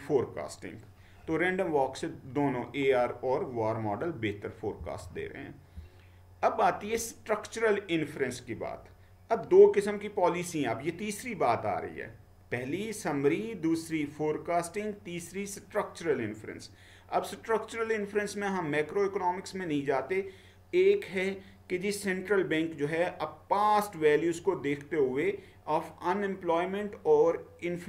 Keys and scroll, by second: 4.8-5.7 Down.